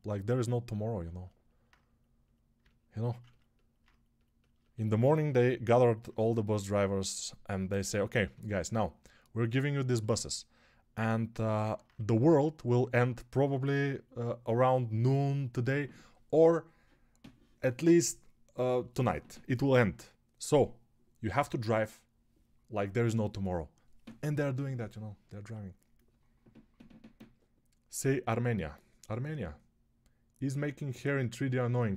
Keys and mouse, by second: 11.8 1.